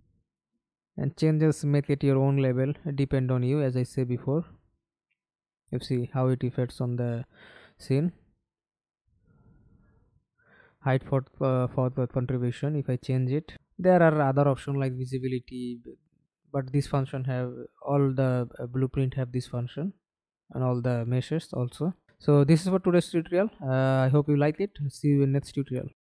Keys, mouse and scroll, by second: 7.2-10.5 scroll down 9, 14.0-15.2 scroll down 5, 15.2-16.0 scroll down 3, 17.1-18.2 scroll down 6, 18.6-21.1 scroll up 2, 21.1 middle click, 25.0 alt+F9.